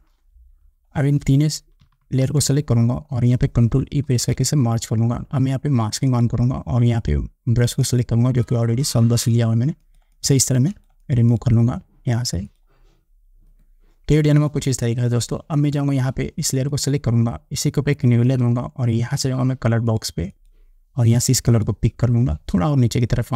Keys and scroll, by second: 4.3 ctrl+e.